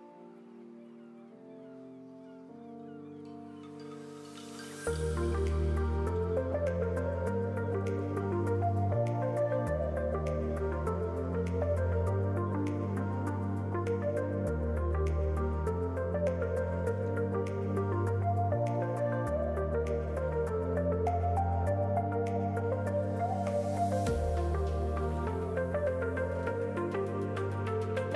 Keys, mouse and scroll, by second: 0.8 scroll down 3, 0.9 alt+a, 1.1 middle click, 1.8-2.2 scroll down 2, 2.0-2.5 scroll up 4, 2.2 middle click, 2.9 shift+middle click, 3.6 middle click, 5.2 s, 7.2 KP_1, 7.8 click, 9.8-10.2 scroll up 4, 10.2 shift+middle click, 10.4 middle click, 13.1 middle click, 14.5 r, 17.8 middle click, 18.2-18.8 scroll down 5, 18.4 alt+a, 18.8 shift+middle click, 19.8 click, 20.6 KP_1, 21.0-21.5 scroll up 2, 21.5 s, 23.5 click, 24.0 middle click, 25.4-25.7 scroll up 1, 25.9 scroll down 2, 26.2 alt+a, 26.4 middle click, 26.9 scroll down 2, 27.2 middle click.